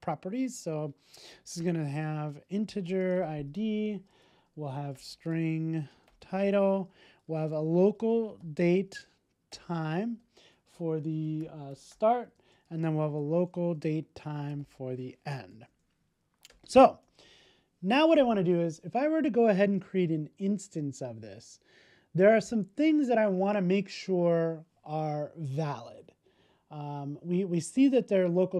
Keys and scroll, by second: 10.1 Return, 17.2 super+s.